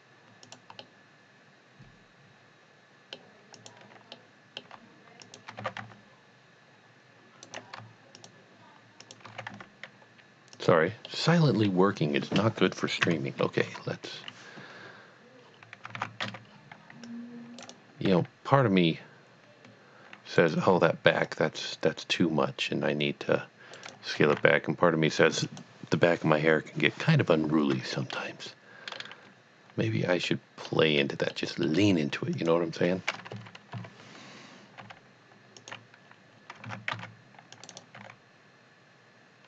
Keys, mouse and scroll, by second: 0.4 click, 1.2-3.3 middle drag, 3.6 click, 4.5 middle click, 5.2 shift+click, 5.6 g, 5.8 y, 7.4 right click, 8.2 shift+click, 9.0 shift+double click, 9.4 g, 9.6 y, 10.7 click, 11.1 middle click, 13.0 KP_Divide, 13.6 KP_3, 15.4-15.8 scroll down 1, 15.9 alt+a, 16.5 scroll down 1, 16.6 right click, 17.1 click, 17.4 click, 17.6 right click, 18.0 right click, 18.1 g, 20.3 right click, 20.8 c, 21.2 click, 23.8 right click, 24.2 g, 25.4 z, 25.5 click, 28.3-28.7 scroll up 1, 29.0 middle click, 30.0-31.1 middle drag, 31.4 middle click, 32.3 click, 33.3 KP_1, 33.9 KP_3, 34.8 g, 35.6 click, 36.7 a, 37.0 c, 37.7 right click, 38.0 g.